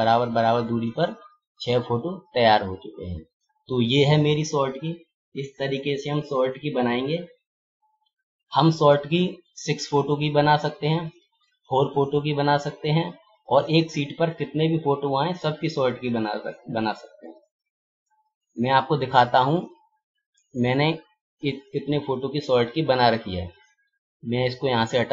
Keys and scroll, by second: 6.0 ctrl+-.